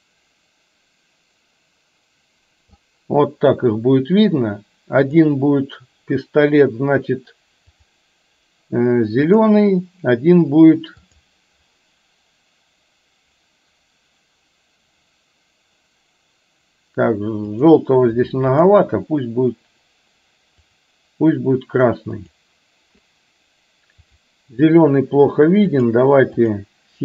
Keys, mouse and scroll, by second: 0.1-2.8 drag, 11.1 click, 18.6 click, 22.3 click, 24.1 click, 26.5 click.